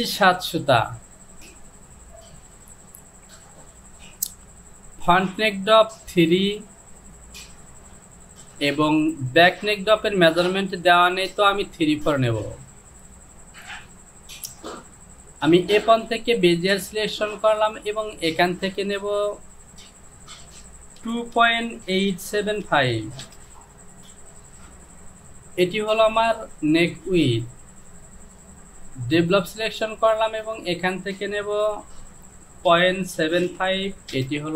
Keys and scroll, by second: 21.4 KP_Decimal, 21.9 KP_8, 22.4 KP_7, 22.7 KP_5, 23.3 Return, 32.2 Down, 32.8 Down, 32.8 KP_Decimal, 33.2 KP_7, 33.5 KP_5, 34.2 Return.